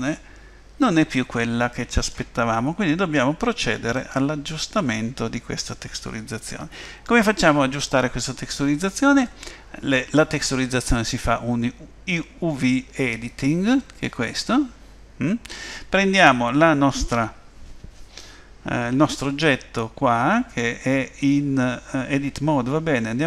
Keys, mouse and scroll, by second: 2.6-3.0 scroll down 2, 4.0 middle click.